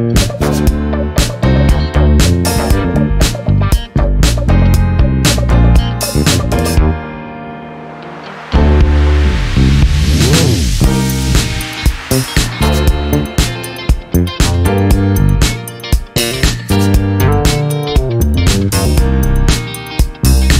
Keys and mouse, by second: 0.0 click, 1.7 click, 2.0 space, 3.1 click, 7.3-8.3 drag, 9.4 click, 15.3 F12, 16.3 space, 16.9 click, 17.3 space, 18.7 space.